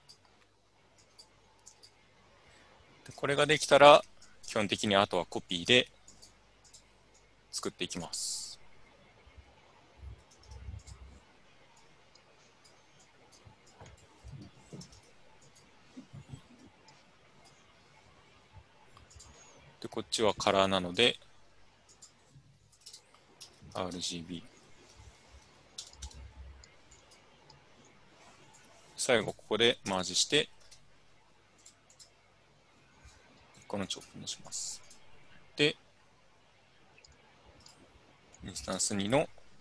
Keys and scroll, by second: 10.1 ctrl+c, 10.3 ctrl+v, 14.8 ctrl+c, 15.0 ctrl+v, 22.8-24.9 typing, 23.6 Tab, 24.0 Tab, 25.5 Tab, 26.1 Return, 26.1 BackSpace, 27.2 typing, 29.6-31.2 typing, 39.4-39.6 typing.